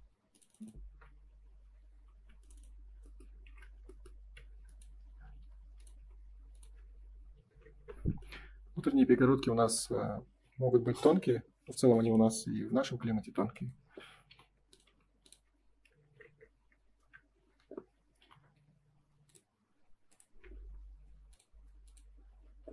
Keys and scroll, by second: 3.4 shift+f, 4.1 ctrl+s, 7.8 Return, 9.0 space, 12.5 space, 16.9 Return, 20.3 Escape.